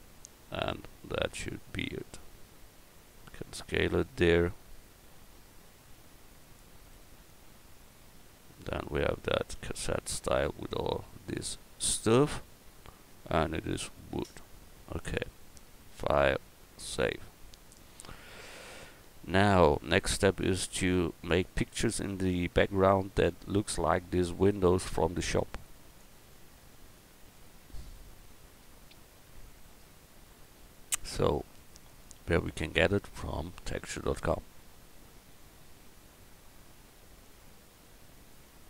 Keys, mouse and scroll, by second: 2.2 s, 7.0 Tab, 9.5 a, 21.0-23.9 middle drag, 25.9-28.1 middle drag.